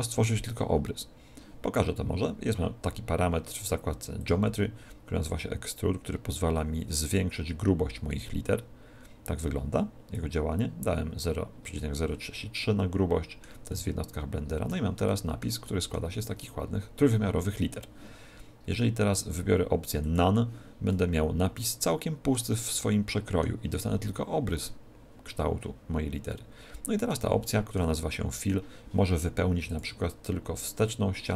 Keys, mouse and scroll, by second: 4.1 click, 12.5 middle click, 13.7 middle click, 15.6 middle click, 19.1 click, 20.9 middle click, 22.5 middle click, 26.3 middle click, 27.4 middle click, 29.6 click.